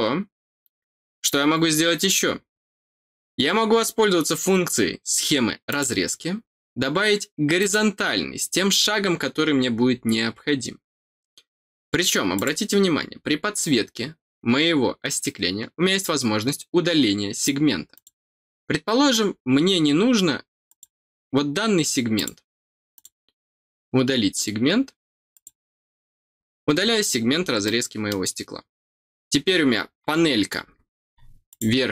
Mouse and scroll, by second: 5.6 click, 7.5 click, 8.6 click, 12.3 click, 17.9 click, 20.6 click, 22.1 click, 22.9 click, 25.3 click, 26.3 middle click, 26.3 scroll up 1, 27.3 scroll up 1, 27.6 middle click, 31.4 click.